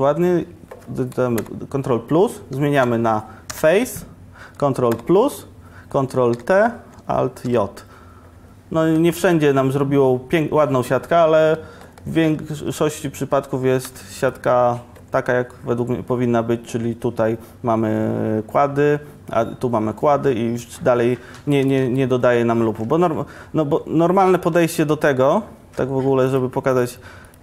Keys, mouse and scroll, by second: 1.4 ctrl+KP_Decimal, 2.6 2, 3.6 3, 5.0 ctrl+KP_Decimal, 6.4 ctrl+t, 7.5 alt+j, 12.2 click, 13.1 Tab, 13.9 2, 22.0 ctrl+r, 25.7 ctrl+Tab.